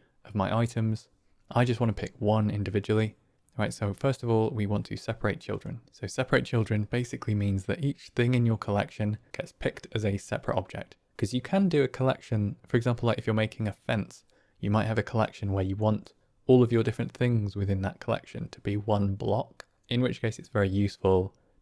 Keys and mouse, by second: 5.4 middle click.